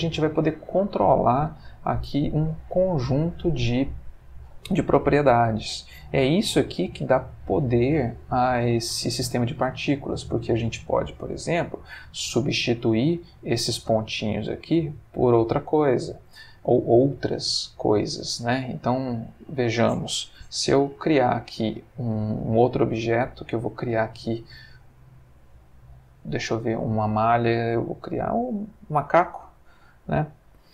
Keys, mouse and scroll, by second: 12.0-12.5 middle drag, 12.6-13.2 ctrl+middle drag, 14.1 space, 15.9 Escape, 16.5-17.1 ctrl+middle drag, 17.6-18.1 middle drag, 18.5-19.0 shift+middle drag, 19.2 shift+click, 20.4 shift+a, 28.6 click, 29.2 g, 30.1 click.